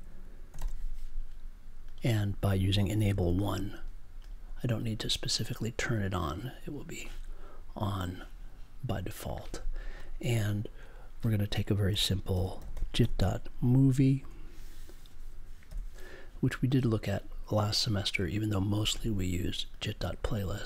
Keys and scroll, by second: 0.5 e, 2.9 space, 3.1 1, 11.9 n, 12.3 j, 13.0 ., 14.1 m, 15.6 o.